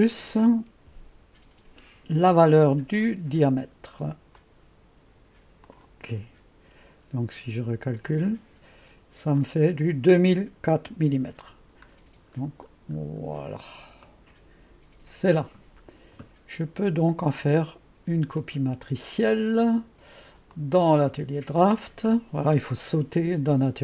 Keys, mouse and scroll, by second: 2.2 ctrl+v, 4.4-6.9 drag, 8.1-9.0 drag, 9.4-12.0 drag, 14.1-15.8 drag, 18.4 click, 20.6 click.